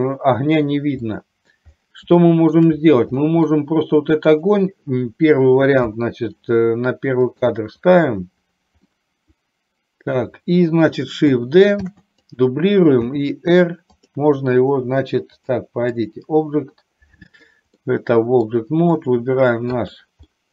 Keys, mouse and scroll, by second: 1.1 middle click, 2.2 shift+middle click, 3.2 middle click, 4.4 click, 6.0 KP_7, 7.5 click, 9.0-10.2 middle drag, 11.9 shift+d, 12.4 click, 13.1 r, 14.0 click, 15.6 click, 18.0 middle click, 19.1 click, 19.9 click, 20.4-20.5 middle drag.